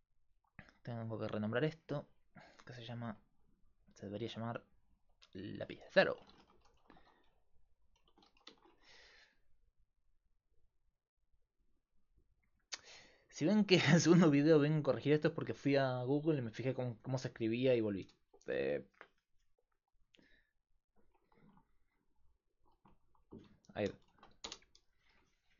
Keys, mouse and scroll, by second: 0.0-25.5 typing, 0.7-3.1 right drag, 4.1-18.0 drag, 20.6-22.3 drag.